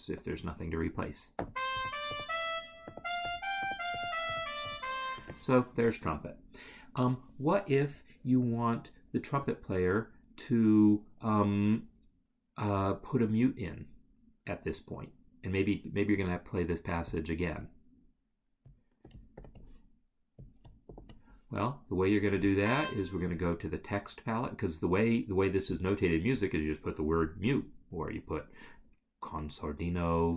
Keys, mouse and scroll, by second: 1.3 d, 17.1 Escape, 19.4 ctrl+c, 22.4 click.